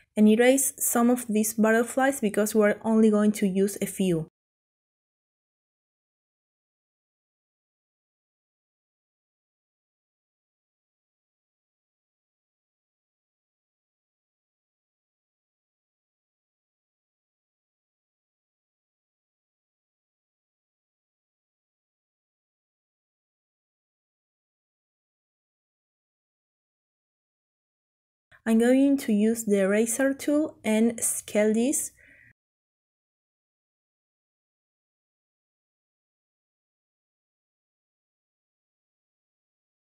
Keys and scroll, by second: 2.2 Delete, 10.6 Delete, 14.7 Delete, 19.4 Delete.